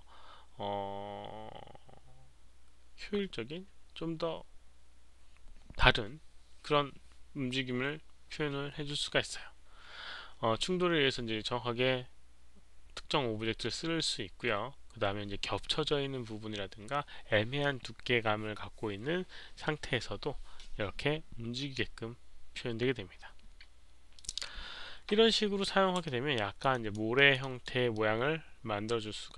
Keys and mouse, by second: 0.6 click, 24.2 click, 26.0-26.6 alt+drag, 26.7 alt+right click, 27.1 alt+click, 27.4-27.9 alt+right drag, 27.9-29.3 alt+drag.